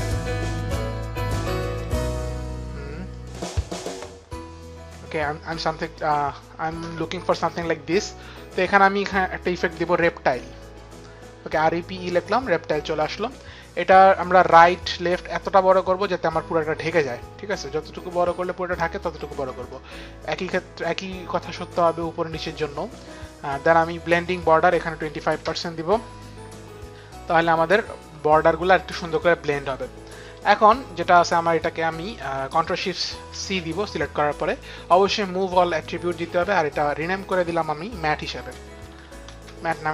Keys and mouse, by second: 0.4 click, 3.1 click, 8.5 click, 9.5-10.8 typing, 12.0 click, 14.6 click, 17.7 click, 19.7 click, 21.8 click, 24.3 click, 25.1 KP_2, 25.2 click, 25.2 KP_5, 25.2 KP_2, 25.4 Return, 31.0 click, 33.4 ctrl+shift+c, 35.3 click, 36.7 click, 38.1-39.2 typing, 39.3 Return.